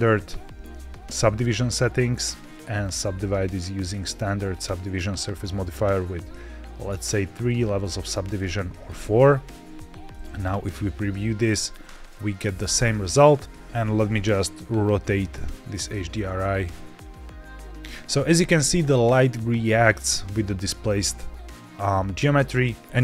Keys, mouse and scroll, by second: 0.3 z, 2.0 click, 2.7 click, 5.5 click, 5.8 click, 6.6 click, 7.3 click, 8.2 click, 8.8 click, 9.6 z, 12.0 middle click, 12.5 scroll up 2, 13.5 click, 14.8 click, 17.3 click, 19.7-22.8 middle drag, 22.3 click.